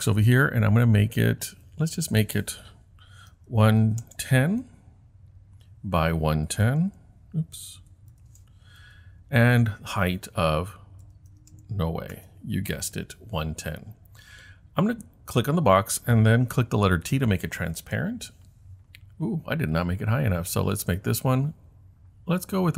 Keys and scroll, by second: 3.3-4.5 typing, 6.2-8.8 typing, 10.8-12.0 typing, 12.2 Return, 16.9 t.